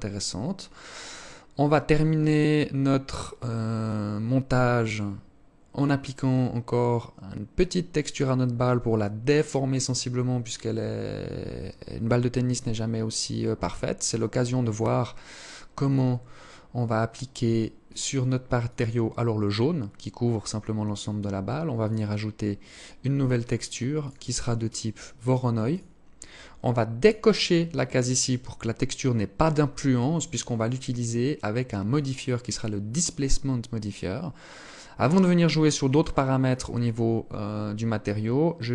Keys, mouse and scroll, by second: 12.6 Escape, 13.7 right click, 14.9 click, 15.4-15.7 scroll up 6, 16.9 click, 17.7 click, 20.8 click, 21.7 click, 23.1 click, 26.0 click, 30.9 click, 38.3 click.